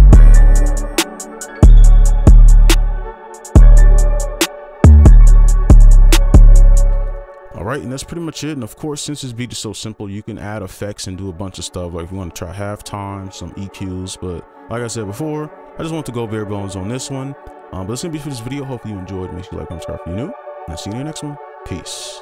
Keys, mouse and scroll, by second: 6.9 space.